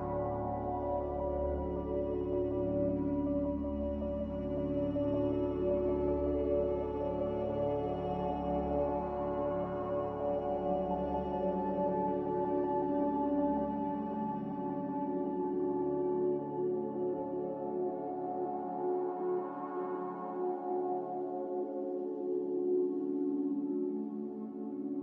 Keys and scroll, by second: 0.3-1.0 typing, 3.5-4.4 typing, 7.5 Delete, 7.5 z, 9.0 ctrl+z, 16.6 a.